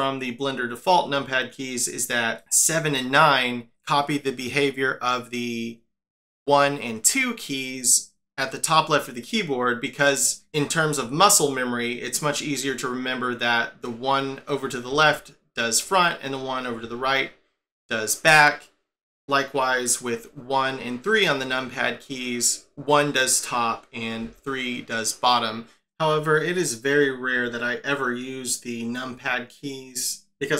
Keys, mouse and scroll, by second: 14.9 KP_7, 22.7 KP_1, 24.2 KP_3.